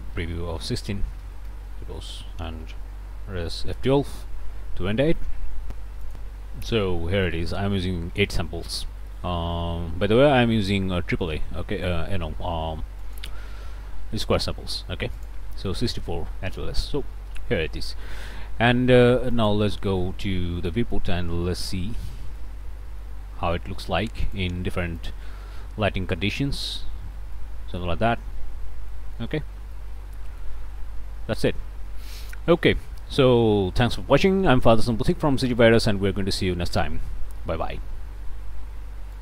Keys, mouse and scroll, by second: 0.6 BackSpace, 1.0 KP_1, 1.2 KP_6, 1.5 KP_Enter, 3.6 F12, 6.1 click, 7.1 click, 13.0 click, 15.2 click, 16.3 middle click, 16.3-16.7 scroll up 2, 16.7 middle click, 19.3 click, 20.6 click, 21.1 middle click, 21.6 shift+click, 22.3 click, 22.6 middle click, 23.0 middle click, 24.2 click, 25.0 click, 26.5 click, 27.3 click, 28.0 scroll down 1, 28.9 click, 29.7 middle click, 30.6 KP_0.